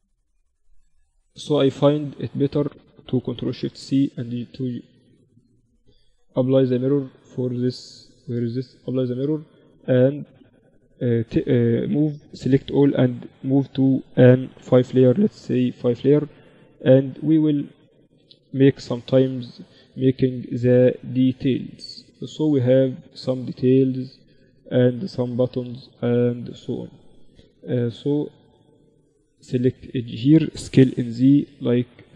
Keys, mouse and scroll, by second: 0.3 Tab, 2.5 ctrl+alt+shift+c, 3.1 click, 4.4 ctrl+z, 5.4 right click, 7.2 z, 8.5-9.5 drag, 9.5 Tab, 10.1 a, 10.3 a, 10.7 a, 11.4 Tab, 12.9 m, 16.1-18.1 drag, 17.5 KP_1, 18.1-24.6 middle drag, 24.8 Tab, 25.5 middle click, 26.5 ctrl+r, 30.1 s, 31.7 ctrl+r.